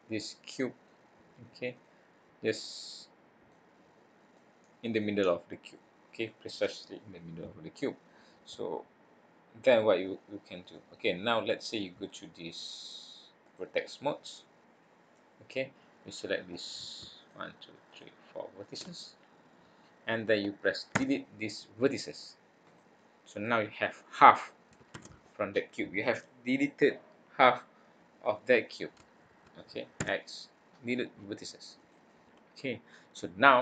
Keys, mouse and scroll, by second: 1.7 click, 2.2-2.6 scroll up 1, 2.6 middle click, 4.3 middle click, 10.7 middle click, 13.5 click, 16.9 click, 17.2 shift+click, 17.9 click, 19.5 shift+click, 20.9 x, 24.9 ctrl+z, 29.9 x, 32.8-33.3 scroll down 4, 33.3-33.6 scroll up 5.